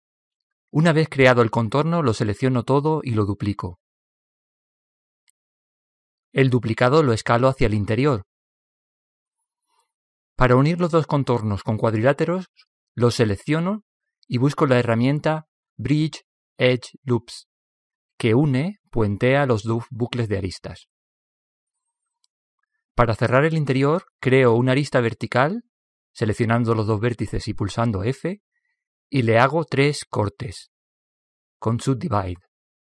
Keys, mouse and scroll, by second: 2.5 shift+d, 5.6 s, 12.2-14.1 right drag, 15.1 space, 18.0 BackSpace, 23.2-27.2 right drag, 27.8 f, 32.2 w.